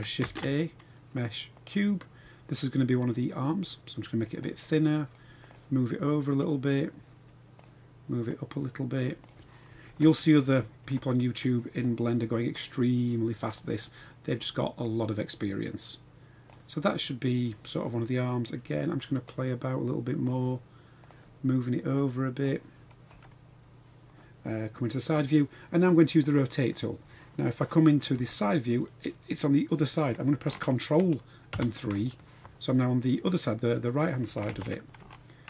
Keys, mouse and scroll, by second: 0.3 shift+a, 3.0 click, 3.3-4.4 drag, 5.4 click, 6.4-7.5 drag, 8.3 click, 8.4 click, 9.9 KP_1, 10.8 KP_3, 12.1-12.5 scroll up 4, 13.5 click, 14.8-16.5 drag, 16.8-18.4 middle drag, 19.2-20.2 drag, 21.0 click, 22.0 click, 23.1 KP_1, 24.5-25.1 middle drag, 26.2 click, 28.1 KP_3, 31.5 ctrl+KP_3, 33.3-34.0 middle drag, 34.5 ctrl+KP_3, 35.1-35.4 shift+middle drag.